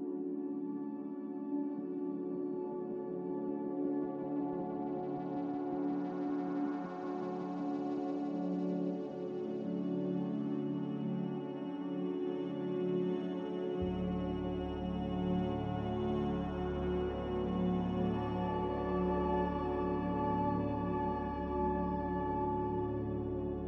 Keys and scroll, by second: 9.3-10.2 typing, 12.1 Escape, 13.4-14.2 typing, 15.3-16.1 typing, 17.9-18.6 typing.